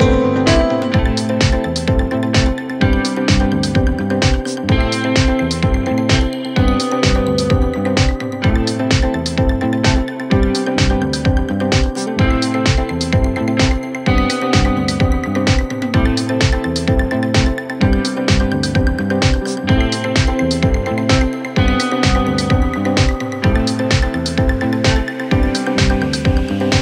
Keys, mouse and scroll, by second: 3.1 click, 4.5 e, 12.4 Tab, 23.7 click.